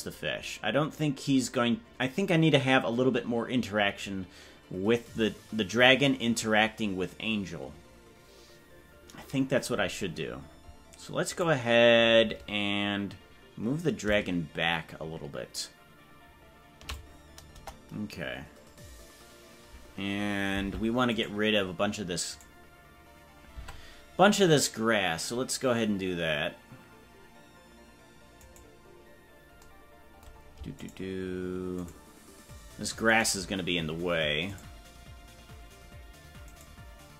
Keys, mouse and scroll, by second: 14.1-17.0 shift+drag, 17.5 KP_0, 20.6 ctrl+Tab, 21.3-27.6 right drag, 27.6 Tab, 31.2-37.1 shift+right drag.